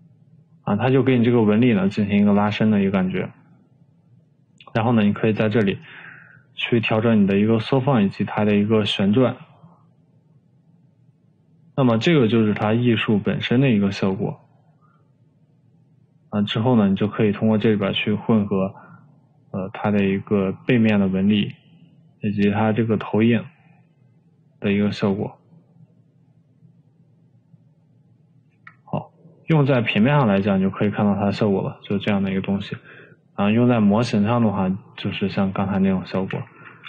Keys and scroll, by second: 7.1 3, 33.3 Delete.